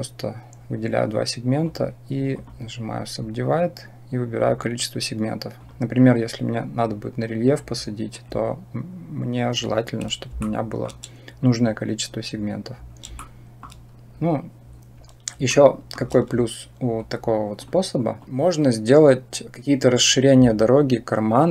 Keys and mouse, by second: 1.5 click, 4.2 click, 5.5-10.1 drag, 10.3 shift+middle click, 13.1 shift+middle click, 15.4 shift+middle click, 18.0 click.